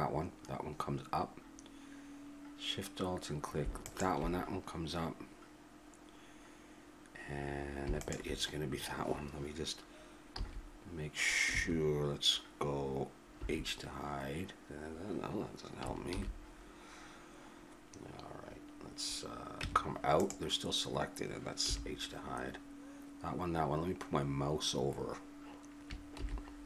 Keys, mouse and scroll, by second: 10.4 z, 13.4 h, 16.1 alt+h, 19.6 Tab, 21.6 h, 26.1 alt+h.